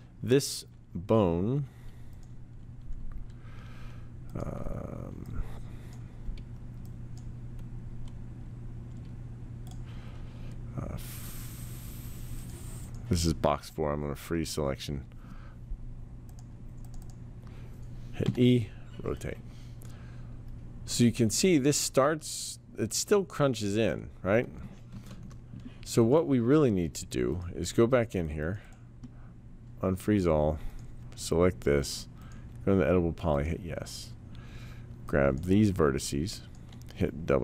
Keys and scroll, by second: 18.2 e, 24.9 ctrl+z.